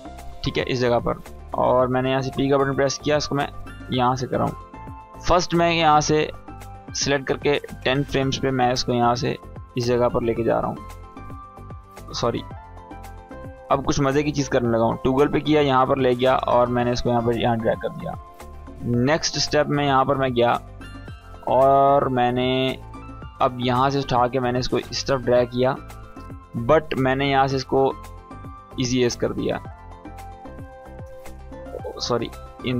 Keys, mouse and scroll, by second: 0.9-1.5 click, 1.8 p, 2.8 click, 5.7-7.9 drag, 9.3-10.2 shift+click, 11.5 ctrl+z, 12.0 click, 12.8 right click, 14.1-15.3 drag, 18.3-19.6 drag, 23.2-23.8 drag, 29.5 space, 30.5-32.1 drag.